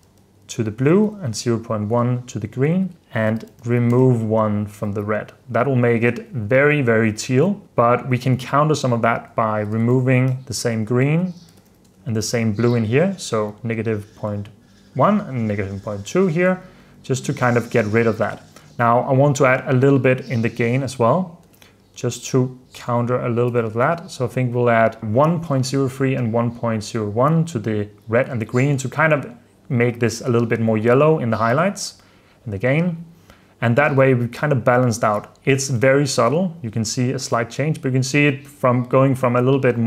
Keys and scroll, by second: 0.2-1.5 typing, 3.0-4.1 typing, 7.3 super+d, 9.6-12.2 typing, 14.1 typing, 16.7 super+d, 17.1 super+d, 20.2-25.5 typing, 34.1 super+f, 34.6 super+d, 35.9 super+d.